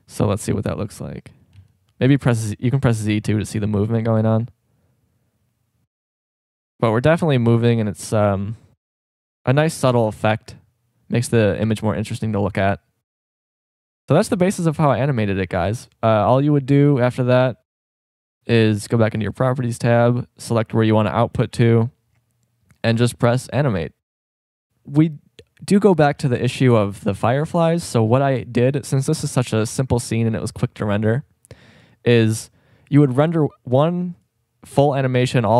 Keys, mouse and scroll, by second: 1.7 z, 3.7 z, 14.3 Escape, 29.5-31.3 middle drag.